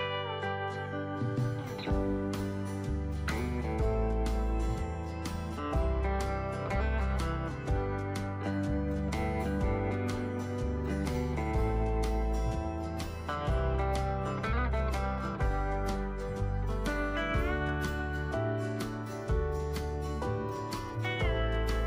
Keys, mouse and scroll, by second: 0.5-20.1 drag, 21.2 click.